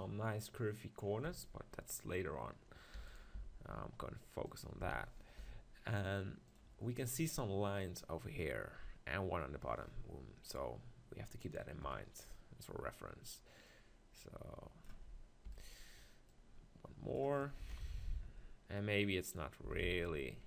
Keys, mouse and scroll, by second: 1.2 z, 3.0 e, 3.2-6.4 right drag, 3.3 s, 4.5 click, 4.8 s, 6.4-8.3 drag, 11.8 KP_1, 13.7-15.0 drag, 15.6 e, 15.6-17.6 right drag, 16.3-17.6 drag, 17.7 KP_7, 17.9 click, 19.6 s.